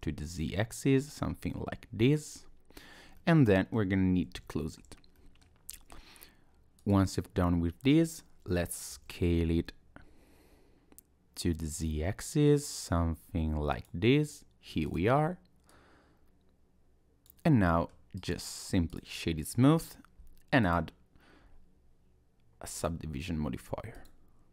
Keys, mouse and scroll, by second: 3.2 middle click, 4.4 f, 5.2 middle click, 5.7 Tab, 6.8 click, 8.9 s, 14.8 click, 15.7 click, 17.6 middle click, 18.2 right click, 19.8 click, 20.6 click, 23.9 click.